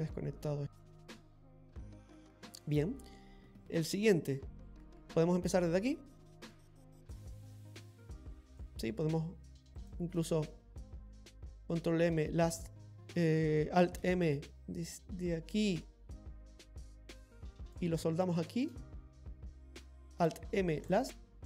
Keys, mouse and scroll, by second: 0.3 scroll down 1, 0.8 middle click, 3.0 middle click, 5.5 click, 9.0 shift+right click, 9.8 shift+right click, 11.6 alt+m, 14.1 alt+m, 15.3 click, 18.4 shift+right click, 20.1 alt+m.